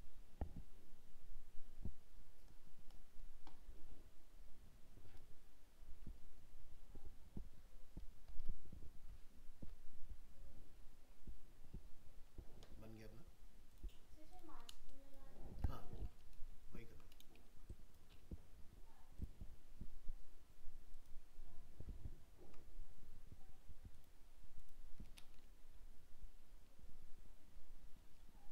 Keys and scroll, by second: 16.4 ctrl++.